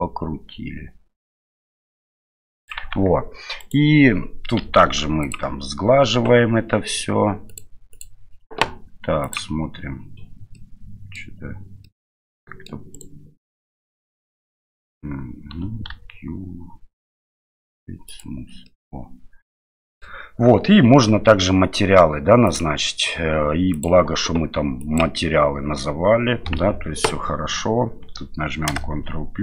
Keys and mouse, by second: 2.9 Tab, 3.6 right click, 4.6 q, 7.5 click, 7.9 click, 10.5-11.2 middle drag, 11.8-12.7 middle drag, 12.9-15.6 right drag, 15.9 q, 18.6-20.0 middle drag, 23.8-25.0 drag, 26.7 Tab, 28.7 ctrl+KP_Add.